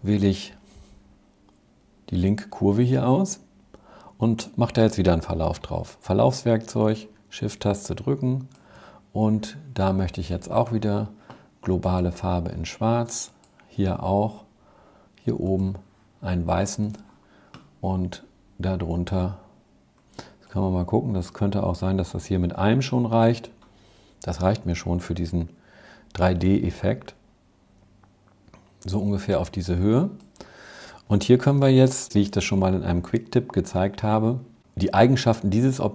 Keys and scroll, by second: 5.2 g, 31.3 v.